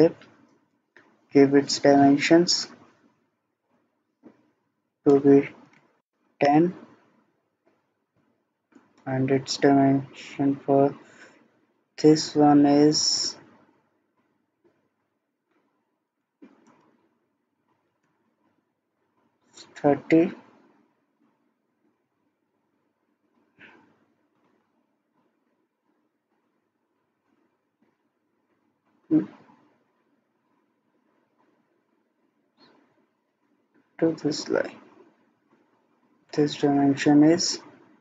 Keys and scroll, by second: 5.5-6.3 typing, 15.9-16.6 typing, 18.0 Return, 27.9 Escape.